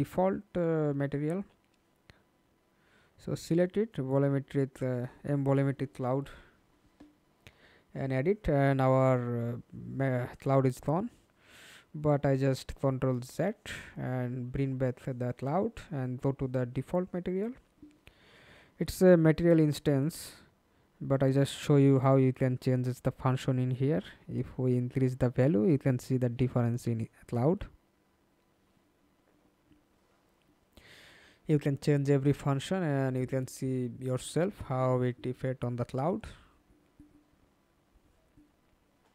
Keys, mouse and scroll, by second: 0.6 scroll down 1, 0.6 middle click, 1.4 ctrl+space, 5.3 F2, 6.4 middle click, 14.7 ctrl+z, 16.0 double click.